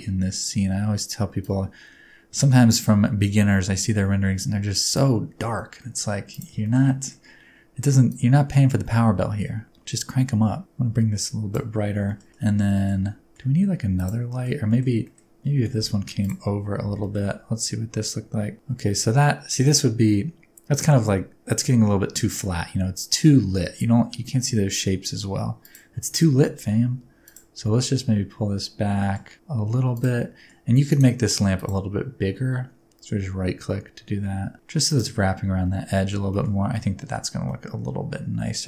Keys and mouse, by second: 1.5-5.0 drag, 5.7 middle drag, 6.3 click, 6.6 shift+middle click, 6.8-7.1 middle drag, 8.1-11.5 drag, 12.0 shift+middle click, 12.7 shift+middle click, 13.9 middle click, 14.3 middle click, 14.6 middle click, 15.0 middle click, 15.5 r, 15.8 z, 16.2 click, 16.9 g, 17.0 middle click, 25.6 click, 26.1 r, 26.3 z, 27.2 click, 27.6 g, 29.0 middle click, 29.9 click, 30.2-30.5 middle drag, 30.9 middle click, 34.8 click, 34.8 middle click, 36.3 shift+middle click, 36.7-37.1 middle drag, 37.4-38.6 middle drag.